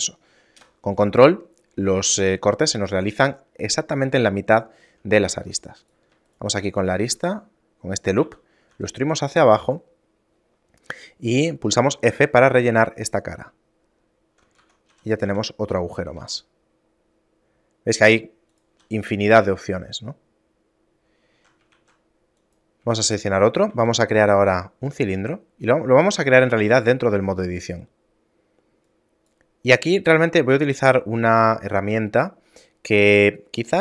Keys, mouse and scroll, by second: 4.9 shift+middle click, 5.5 ctrl+Tab, 6.5 alt+right click, 6.9 shift+middle click, 8.3 e, 12.0 f, 12.3 a, 12.8 shift+middle click, 14.8 Tab, 15.1 a, 15.4 a, 16.3 g, 18.9 a, 19.3 shift+middle click, 21.9 shift+a, 23.3 shift+middle click, 23.9 shift+a, 26.1 Tab, 27.1 shift+a, 30.9 shift+middle click.